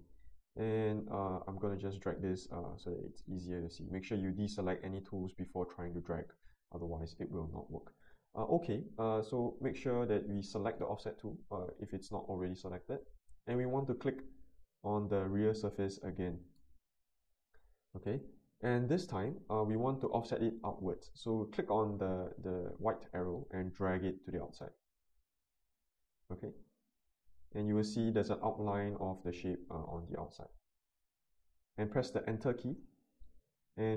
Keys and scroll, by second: 32.7 Return.